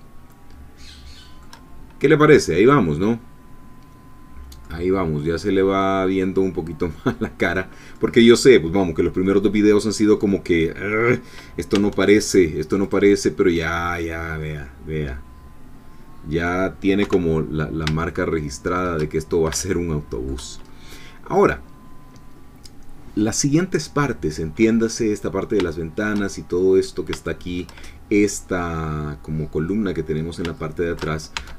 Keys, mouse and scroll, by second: 2.0-2.3 shift+scroll down 1, 2.3-4.8 middle drag, 4.9 scroll down 1, 5.2-7.1 middle drag, 7.5 middle click, 8.2-9.2 scroll down 1, 9.2 middle click, 10.2 scroll up 1, 12.4 Tab, 12.4 middle click, 12.8 click, 13.6-17.0 middle drag, 17.0 3, 18.1 shift+middle click, 19.2-19.7 shift+scroll down 1, 19.7 shift+middle click, 20.6-21.2 shift+scroll up 1, 25.7 shift+middle click, 27.3 shift+click, 30.6 shift+click, 31.4 shift+Tab.